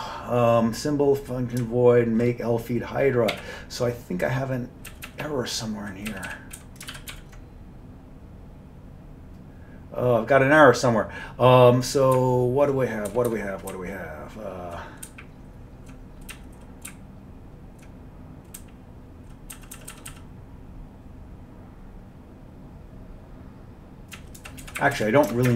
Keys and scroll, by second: 3.4 q, 5.0 Down, 5.2 Down, 5.3-6.0 Down, 6.2 Down, 6.4 Down, 6.7 Up, 7.0 ctrl+x, 7.2 ctrl+e, 12.2 Up, 12.8 Up, 13.0 Up, 13.2 Up, 13.4 Up, 13.8 Down, 14.3-14.7 Down, 15.2 Up, 15.7-16.0 Up, 16.4 Down, 16.6 Down, 17.0 Up, 17.5 Up, 17.5 Up, 17.7 Up, 17.8 Up, 18.7 Down, 19.2 Down, 19.2 Down, 19.6 Down, 24.2 Down, 24.5 Down, 24.7 Right, 24.9 Up, 25.0 Right.